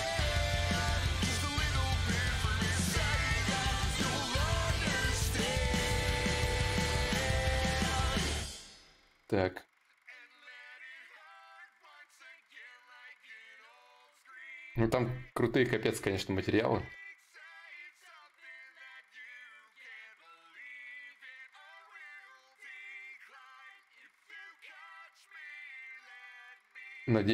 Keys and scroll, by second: 16.3 alt+Tab, 23.3 alt+Tab, 24.1 alt+Tab, 25.3 alt+Tab, 25.9 alt+Tab, 26.3 alt+Tab.